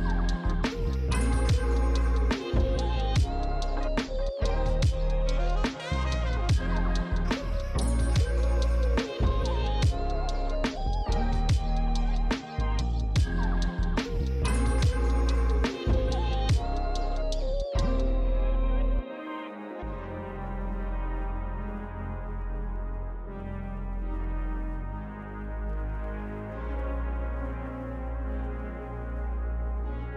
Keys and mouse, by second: 0.0 Tab, 1.8 click, 2.5 shift+click, 7.6 alt+shift+click, 8.2 ctrl+z, 8.3 alt+shift+click, 9.2 ctrl+z, 9.5 alt+shift+click, 10.8 shift+click, 11.2 ctrl+z, 11.4 ctrl+click, 11.5 ctrl+click, 13.3 ctrl+click, 14.7 alt+shift+click, 15.7 ctrl+click, 16.3 click, 16.8 ctrl+click, 17.6 click, 18.0 ctrl+click, 19.0 click, 19.5 ctrl+click, 19.9 ctrl+z, 20.0 click, 20.3 ctrl+click, 21.7 click, 22.5 alt+shift+click, 23.6 alt+shift+click, 28.4 click, 28.5 alt+shift+click, 30.0 click.